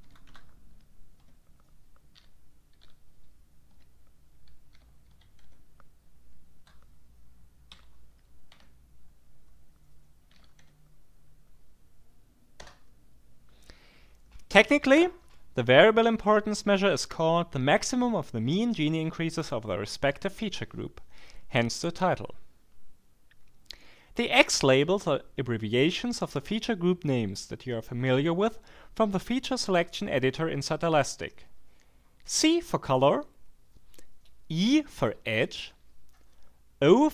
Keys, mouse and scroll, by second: 0.0-0.8 typing, 1.1 Tab, 2.1 i, 2.7 a, 3.7 Tab, 4.7 d, 5.1 a, 5.4 Tab, 7.7 y, 8.0 e, 8.5 b, 10.1-11.0 typing, 12.6 Return.